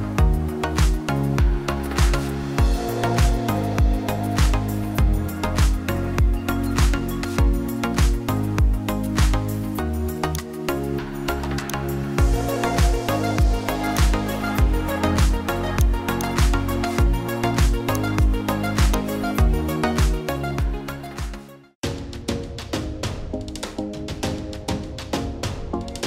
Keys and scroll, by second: 23.2 shift+4, 24.4 KP_1, 24.6 KP_0.